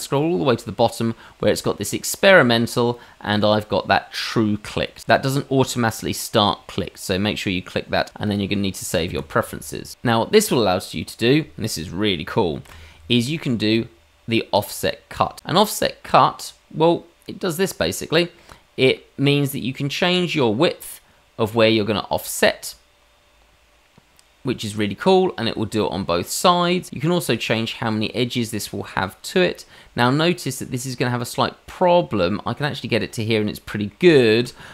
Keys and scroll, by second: 12.6 y.